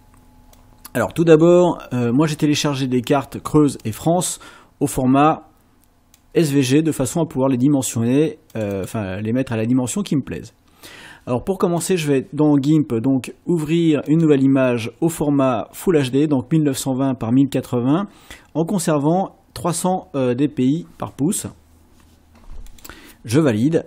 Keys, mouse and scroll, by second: 0.6 click, 6.2-8.1 drag, 8.5 click, 11.8 click, 14.1 click, 22.7 click.